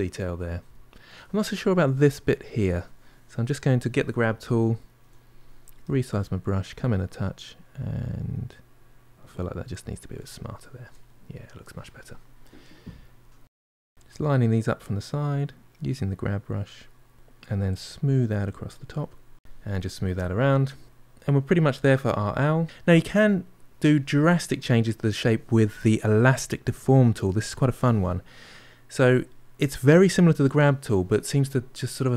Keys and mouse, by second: 3.5-4.8 drag, 4.8 f, 5.7-7.3 shift+middle drag, 7.3-9.6 drag, 9.6-11.5 ctrl+middle drag, 13.3 ctrl+middle click, 14.1-15.3 drag, 15.4 click, 16.4 ctrl+middle click, 17.1-18.8 shift+drag, 18.8 middle click, 19.1 shift+click, 19.6 ctrl+middle click, 19.9 shift+click, 20.2-22.6 middle drag, 27.4-30.4 drag.